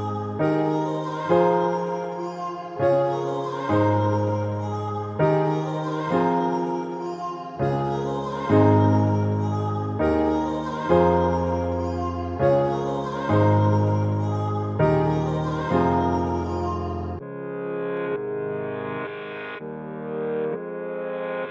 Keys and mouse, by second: 5.1-13.0 drag.